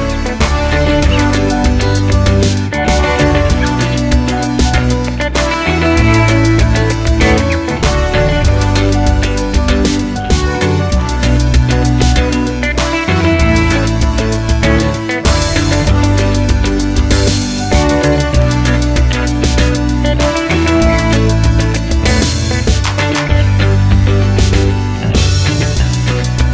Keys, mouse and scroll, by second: 0.7-1.9 drag, 1.9-6.5 middle drag, 2.2 scroll up 2, 2.5 scroll down 2, 2.9 scroll up 2, 3.1 scroll down 2, 3.3 scroll up 2, 6.5-8.0 drag, 12.0 shift+middle click, 12.3 click, 13.4 click, 16.2-22.3 drag, 22.3-24.3 middle drag, 22.6 scroll up 1, 23.2-24.3 scroll down 1, 24.3 click, 24.7-26.5 middle drag, 25.0 scroll up 1.